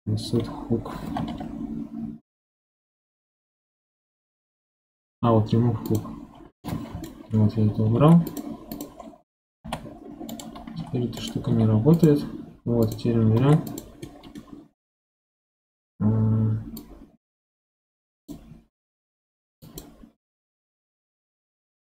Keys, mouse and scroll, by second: 1.2 ctrl+h, 6.6 middle click, 7.3 scroll up 3, 8.0 ctrl+Tab, 8.7 click, 9.0 scroll down 1, 9.6 g, 10.7 c, 11.5 x, 12.8 click, 13.4 ctrl+Tab, 14.0-16.8 middle drag, 16.8 click, 19.6 click.